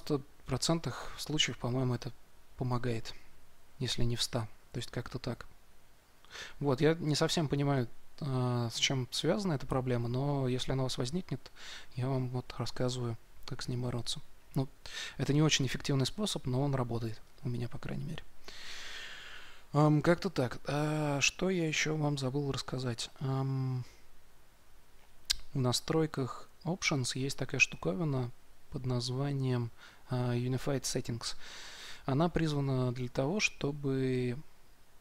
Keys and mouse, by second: 4.7-17.1 middle drag, 17.1-35.0 drag.